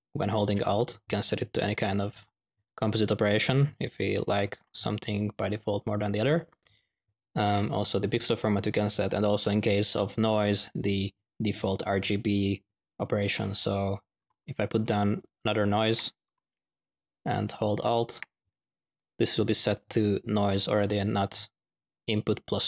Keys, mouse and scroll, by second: 1.9-2.5 drag, 2.3 typing, 3.9 ctrl+z, 4.2 ctrl+z, 7.9 click, 9.2 click, 10.0 typing, 10.2 click, 12.9 click, 13.5 click, 13.6 u, 14.2 middle click, 14.2 x, 14.6 click, 15.1-15.9 drag, 15.8 n, 17.2-17.6 alt+drag, 17.8 alt+click, 18.8 click, 19.6 click, 22.2-22.6 drag.